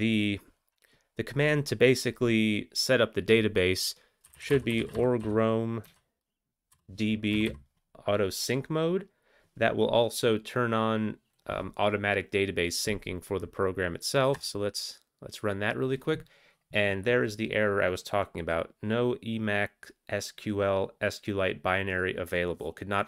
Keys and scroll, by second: 4.2-8.2 typing, 14.3 Return.